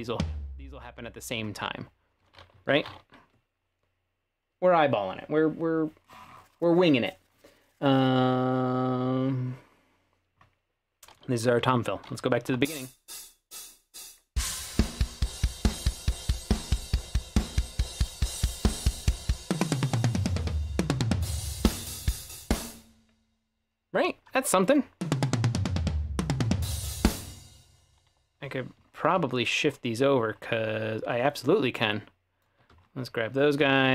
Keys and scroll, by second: 11.6-12.6 typing, 22.6 space, 25.0 space, 27.1-28.1 typing.